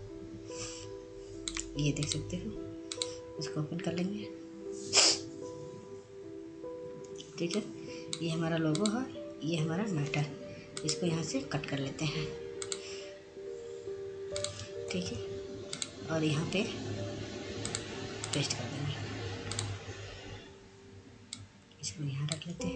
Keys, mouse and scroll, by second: 1.8-4.2 drag, 9.4-12.3 drag, 14.6 click, 16.4 click, 16.9 ctrl+Tab, 17.8 click, 19.8 click.